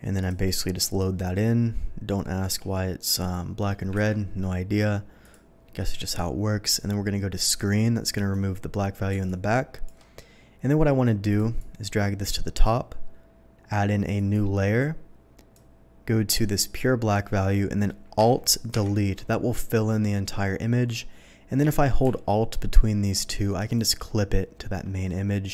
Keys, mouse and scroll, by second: 0.2 click, 1.0-2.4 shift+drag, 3.2 shift+click, 4.0 ctrl+t, 5.2 click, 8.1 click, 9.2 alt+click, 11.3 alt+click, 11.5-12.6 alt+drag, 14.1 click, 15.5-17.1 drag, 18.7 alt+Delete, 23.6 alt+click.